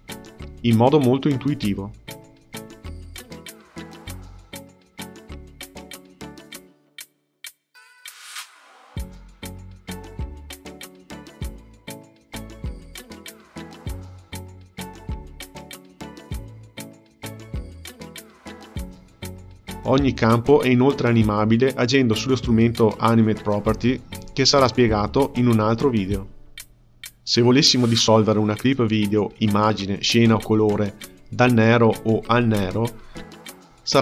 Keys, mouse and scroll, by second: 0.0 click, 0.0 space, 4.5 space, 5.0-8.0 drag, 8.0 space, 10.6 space, 12.7-16.3 drag, 16.3 space, 27.4-28.4 drag, 28.4 space, 31.1 space, 32.6 click.